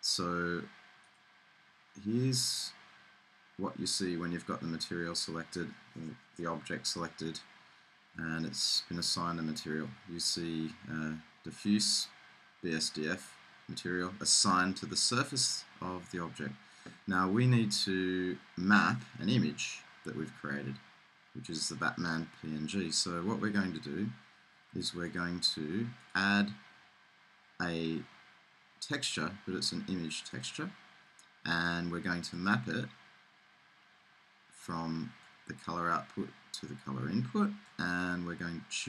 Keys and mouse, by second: 2.0-4.4 middle drag, 7.2-20.0 middle drag, 20.4-25.1 middle drag, 25.1-27.7 right drag, 27.7 click, 35.3-37.1 drag.